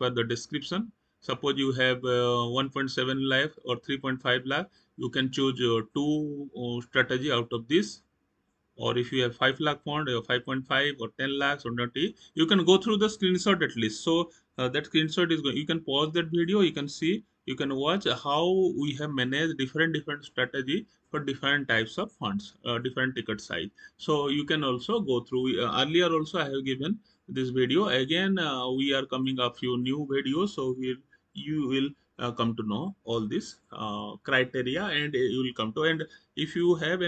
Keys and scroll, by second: 11.5 Down, 22.2 Down, 23.3 Down, 27.5 Down.